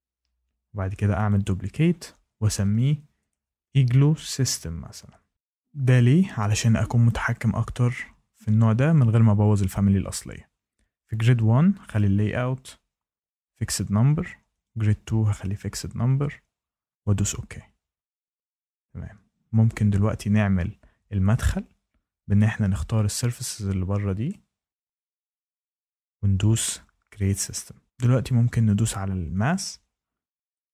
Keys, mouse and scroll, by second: 1.2 click, 2.5-5.5 typing, 5.3 click, 7.3 click, 11.9 click, 13.5 click, 14.6 click, 15.3 click, 17.0 click, 22.3 click, 23.4 click, 25.0 shift+middle click, 25.8 click, 27.2 click, 28.7 click, 29.4 click, 30.6 right click.